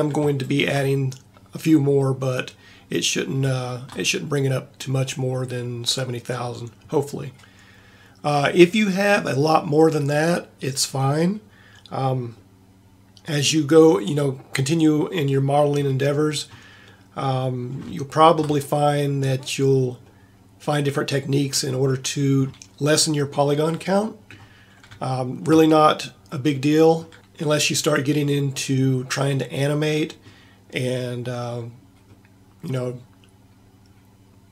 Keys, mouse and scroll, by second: 12.5-13.7 middle drag, 14.9-16.2 middle drag, 33.4-34.5 middle drag.